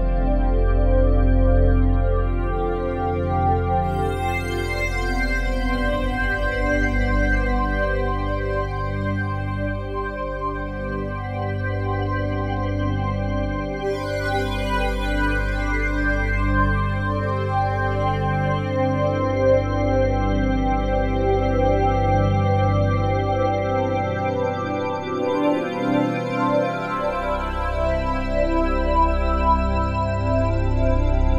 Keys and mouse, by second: 0.3-1.3 drag, 1.6 click, 2.7 Right, 4.2 i, 5.2-7.2 drag, 7.2-8.1 typing, 8.7-11.1 drag, 11.1 s, 11.5 0, 11.8 Return, 12.4 i, 12.8-13.7 drag, 13.7 ctrl+s, 14.1-16.1 typing, 18.9 click, 19.6 shift+click, 20.6 click, 24.3 click, 25.3-26.6 drag, 25.3 typing, 26.6 typing, 27.3 click, 28.2 typing, 29.6 click, 30.3 typing, 30.8-31.3 drag.